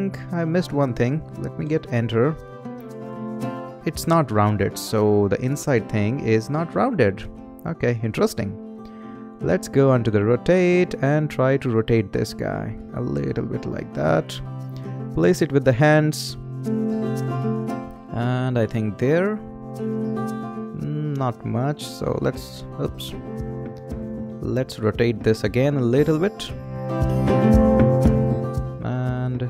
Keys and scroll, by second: 1.6 Return, 23.3 super+z.